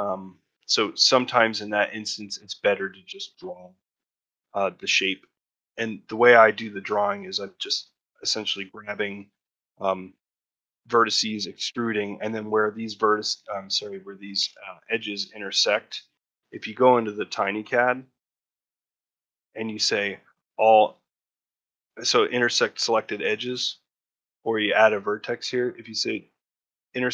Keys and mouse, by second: 0.8 ctrl+middle click, 1.2 shift+middle click, 1.5 ctrl+middle click, 6.1 shift+middle click, 8.4 ctrl+middle click, 12.2 ctrl+middle click, 18.8-27.1 right drag.